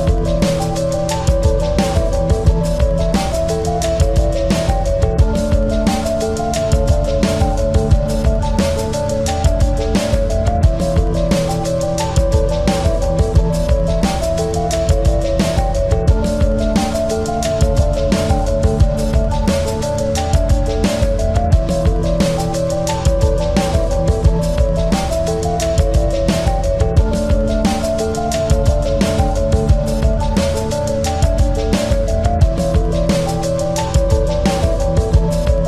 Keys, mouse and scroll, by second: 6.1 ctrl+z, 7.3 e, 8.5 click, 8.9 s, 11.5 e, 13.0 s, 16.0-17.7 drag, 16.5 e, 17.8-19.6 drag, 18.1 s, 19.7-21.1 drag, 20.0 e, 21.6 s, 23.5-27.8 drag, 28.6 Tab, 29.3-32.5 drag, 32.5 KP_1, 35.4 right click.